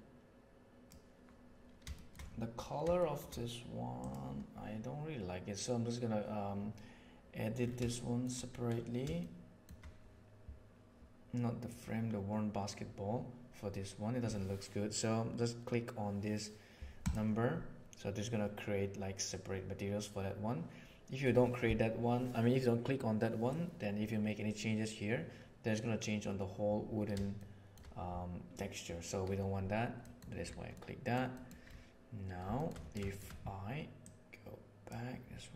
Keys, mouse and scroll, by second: 1.9 shift+middle drag, 3.0 shift+middle click, 8.0 shift+middle click, 9.3 shift+middle click, 11.6 click, 17.0 click, 27.3-27.7 shift+middle drag, 30.1 middle click, 30.6 middle click, 31.3 middle click, 33.0 shift+middle click, 33.9-34.8 drag.